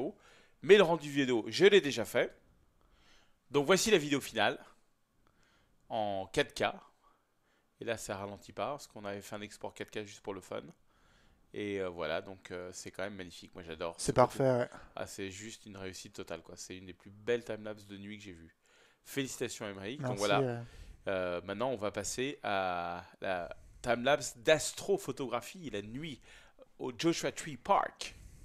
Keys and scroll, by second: 2.7 super+f.